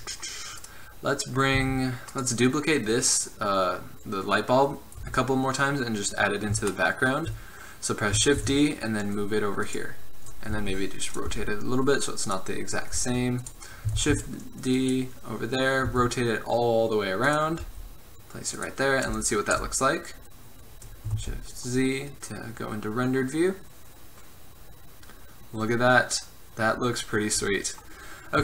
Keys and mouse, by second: 1.7 z, 5.1 KP_7, 8.5 shift+d, 10.7 r, 11.4 g, 13.1 g, 14.1 shift+d, 16.0 r, 17.8 g, 19.6 KP_0, 21.3 shift+z.